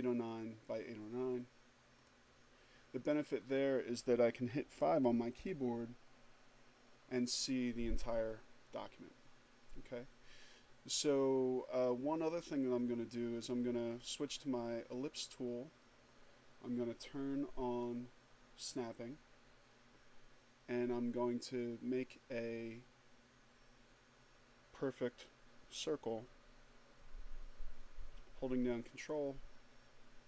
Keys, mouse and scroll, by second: 1.7 click, 3.2 click, 5.1 5, 12.0 click, 13.7 click, 17.6 click, 22.7-30.2 drag.